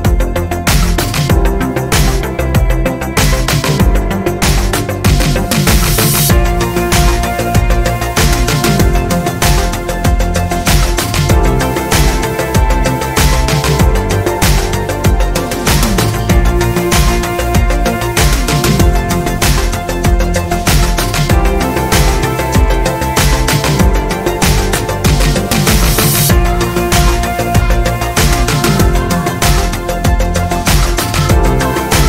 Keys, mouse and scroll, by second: 0.0 ctrl+alt+shift+Right, 2.0-2.7 ctrl+alt+scroll down 5, 5.8-6.6 ctrl+scroll up 6, 8.1 ctrl+click, 9.0 ctrl+click, 9.4 ctrl+click, 9.9 ctrl+click, 10.4 ctrl+click, 11.4 ctrl+click, 13.5 click, 14.4 click, 15.8 click, 17.7 alt+Down, 20.1-21.1 ctrl+alt+scroll down 4, 21.5 ctrl+space, 22.7 ctrl+scroll down 2, 24.1 ctrl+d, 24.7-26.0 ctrl+drag, 26.9 click, 27.7-28.2 ctrl+scroll up 2, 28.5 ctrl+click, 30.1 click, 31.7 Left.